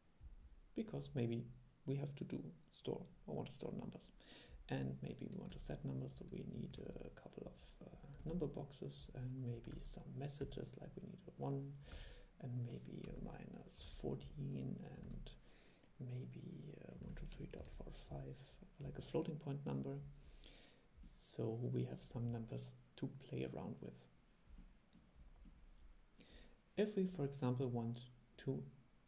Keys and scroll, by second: 5.6 super+3, 6.9 super+3, 8.5 super+3, 9.9 super+2, 12.1 super+2, 15.2 super+2.